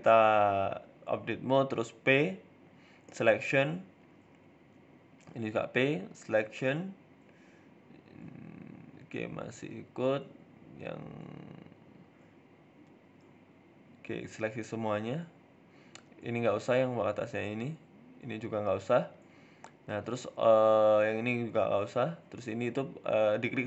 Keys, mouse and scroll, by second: 0.1 middle click, 0.8 click, 1.7 middle click, 2.6 p, 3.5 Tab, 4.7 right click, 5.1 Tab, 5.6 click, 6.6 p, 7.3 Tab, 8.0 right click, 8.3 r, 10.0 Tab, 10.4 right click, 10.9 KP_1, 11.5 shift+middle click, 12.3 scroll down 2, 13.2 click, 17.2 middle click, 17.8 middle click, 18.2 shift+right click, 18.6 middle click, 19.6 ctrl+p, 20.5 right click, 20.9 ctrl+z, 21.1 shift+right click, 22.3 ctrl+p, 23.3 right click.